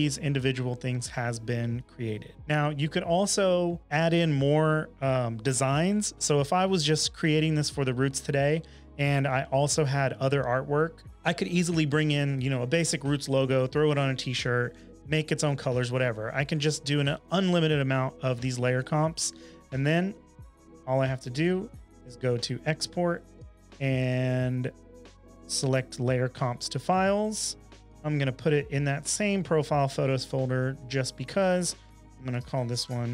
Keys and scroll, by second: 31.1 super+a, 31.4-33.1 typing.